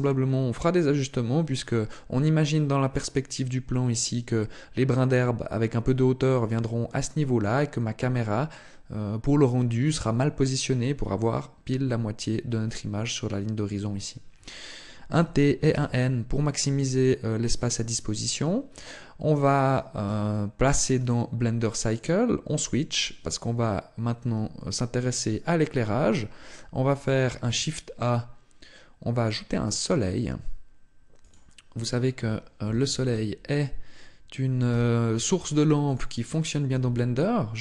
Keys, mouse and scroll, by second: 14.9 t, 15.5 n, 16.4-16.8 scroll down 5, 16.8-17.2 scroll up 2, 18.0 scroll up 1, 18.5 middle click, 20.8 click, 27.0 shift+a, 32.4 KP_3, 34.6 g, 35.8 click, 36.6 g.